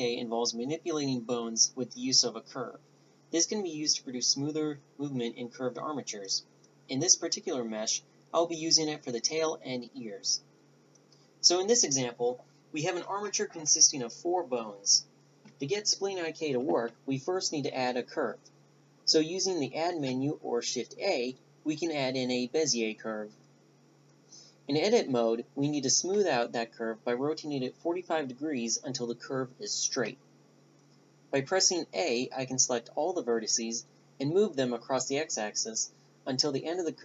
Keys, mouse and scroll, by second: 0.0 n, 19.0 click, 24.2 Tab, 24.7 a, 25.1-27.0 right drag, 25.5 r, 28.4 a, 29.2 a, 30.3-31.9 drag, 35.9 a, 36.3 Tab.